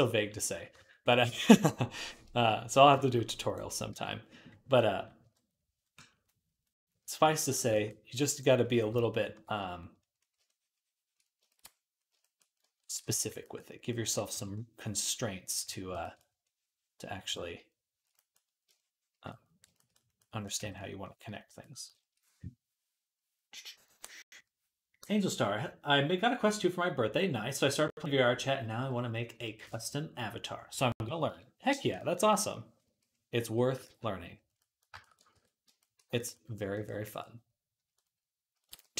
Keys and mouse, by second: 0.0-1.3 middle drag, 1.3-2.9 drag, 3.7 ctrl+Tab, 5.0 KP_3, 7.3 shift+middle click, 7.4-8.7 ctrl+right drag, 8.7-12.2 drag, 8.7 j, 9.3-12.2 right drag, 32.7 i, 33.7 ctrl+z, 35.2 ctrl+r, 36.7-38.6 ctrl+drag, 38.6 shift+middle click, 38.7 shift+click.